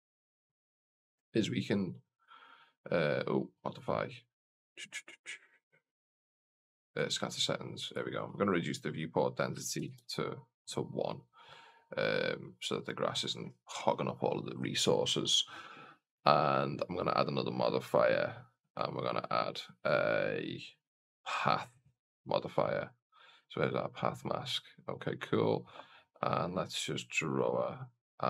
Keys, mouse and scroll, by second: 0.4 click, 2.3 click, 7.0 click, 8.0-10.4 drag, 16.9 click, 17.8 click, 20.9-23.7 drag, 24.5-25.6 scroll down 1, 25.6-27.0 scroll down 1, 27.1 click.